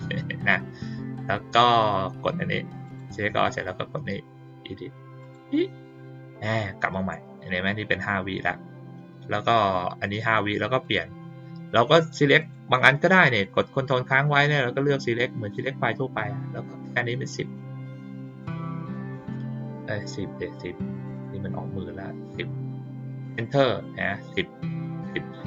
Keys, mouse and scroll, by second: 2.8 click, 5.2 click, 10.8 click, 11.7 click, 12.3 click, 14.1 ctrl+click, 14.7 ctrl+click, 16.9-17.2 drag.